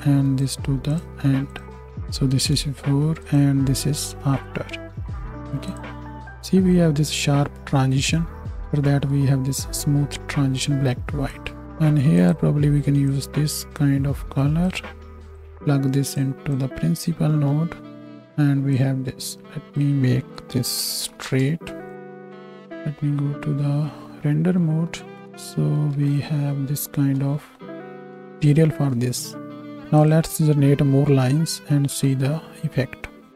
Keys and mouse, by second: 1.0 click, 1.6-10.5 drag, 12.3-15.3 drag, 18.0-20.6 right drag, 20.6 s, 22.3 z, 25.9 z, 30.1-33.3 right drag, 31.8 z.